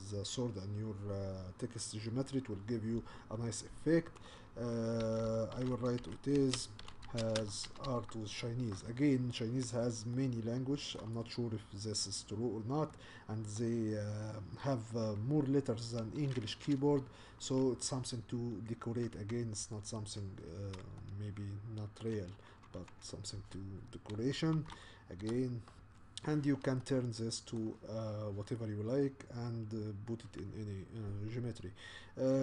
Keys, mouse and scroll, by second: 4.2-8.4 typing, 10.2 shift+middle click, 11.1-11.7 scroll down 1, 11.7-13.0 scroll down 1, 13.0-14.1 middle drag, 14.1-14.9 scroll up 1, 14.9-15.3 scroll up 1, 20.0 Tab, 21.0-23.4 middle drag, 23.4 r, 26.8-32.4 middle drag.